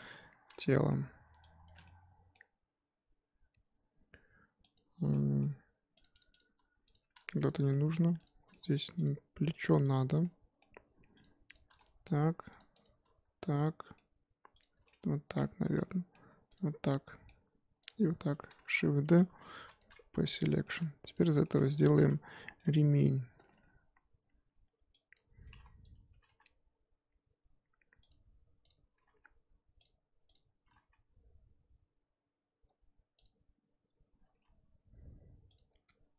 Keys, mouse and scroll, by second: 0.0 shift+click, 0.5-1.6 middle drag, 1.6 shift+click, 1.8-4.7 middle drag, 4.7 shift+click, 5.1-6.0 middle drag, 6.1 shift+click, 6.9 shift+click, 7.4 ctrl+click, 7.7-8.1 middle drag, 8.1 shift+click, 8.5-8.9 middle drag, 8.9 shift+click, 9.6 shift+click, 10.2-11.2 middle drag, 11.2 shift+click, 11.5 shift+click, 11.7-12.1 middle drag, 12.1-12.6 scroll up 1, 12.7 shift+click, 13.4-14.6 middle drag, 14.6 shift+click, 14.8 middle click, 15.6 scroll down 2, 15.7 middle click, 16.5 shift+click, 16.8-17.9 middle drag, 17.9 shift+click, 18.6 shift+d, 19.8 p, 20.1 Tab, 20.6-21.1 shift+middle drag, 21.1 click, 21.4 shift+middle drag, 21.6 scroll up 2, 21.8 Tab, 22.0 1, 22.1-25.1 middle drag, 25.1 click, 25.4 g, 26.1 g, 28.7 click, 28.9 g, 30.3 click, 30.7 g, 34.2 g.